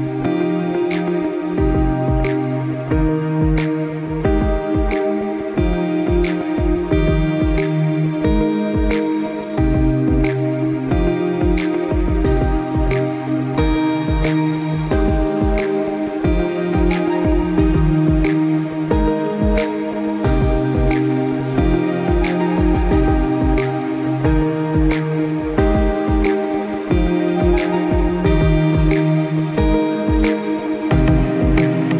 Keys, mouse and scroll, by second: 0.4 shift+click, 3.9 click, 10.0 shift+click, 11.3 shift+click, 12.7 click, 16.6 i, 18.2 click, 22.4 click, 24.9 i, 25.5 click, 27.4 scroll down 1, 27.9 space, 28.0 click, 28.2 space, 29.1 click.